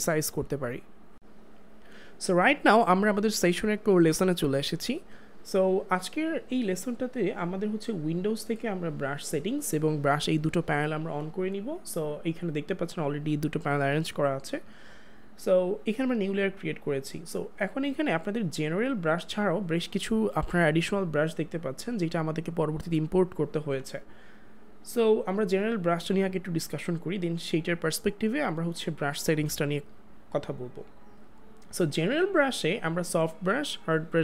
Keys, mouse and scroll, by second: 8.0 click, 16.6 click, 32.0 click.